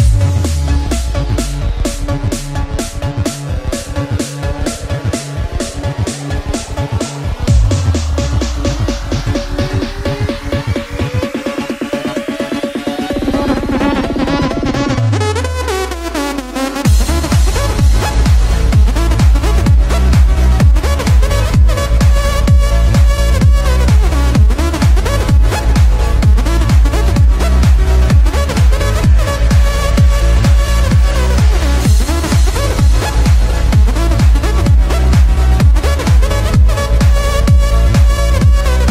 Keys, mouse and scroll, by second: 5.1-6.4 scroll down 10, 7.9 click, 9.7 click, 10.2-13.8 drag, 15.6 click, 16.8-19.2 drag, 19.2 x, 19.9 shift+a, 25.3-26.5 drag, 26.5 x, 27.7 shift+a.